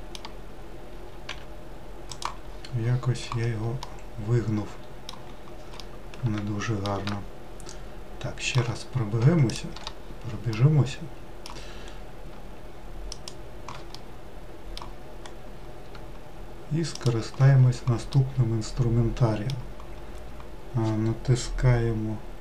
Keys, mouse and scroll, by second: 1.3 g, 2.5-3.9 scroll down 14, 3.9-5.4 middle drag, 5.4-5.8 scroll down 2, 5.8-9.6 middle drag, 9.6 shift+click, 10.0 scroll down 2, 10.5-13.1 middle drag, 13.1 shift+click, 14.0-15.2 middle drag, 15.2-15.8 scroll up 2, 17.0 shift+click, 17.7-18.0 scroll down 2, 18.2-21.3 middle drag.